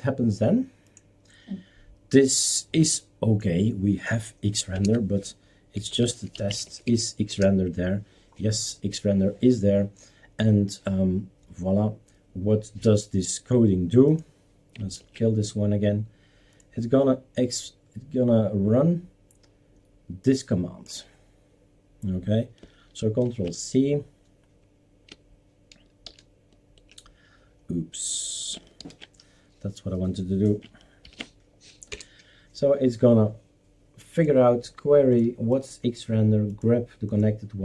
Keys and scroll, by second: 4.8 super+Return, 5.6-7.4 typing, 15.0 shift+super+q, 23.3 ctrl+c, 26.1 super+t, 28.8 ctrl+alt+t, 31.1 ctrl+shift+v, 31.9 Return.